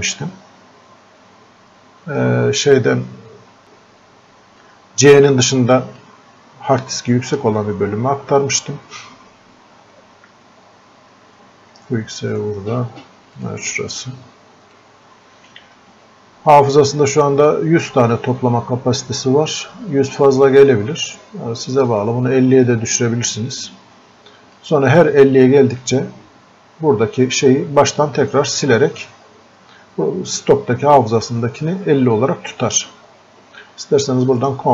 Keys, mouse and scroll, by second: 3.6-17.9 drag, 22.0-27.0 drag, 32.7 click.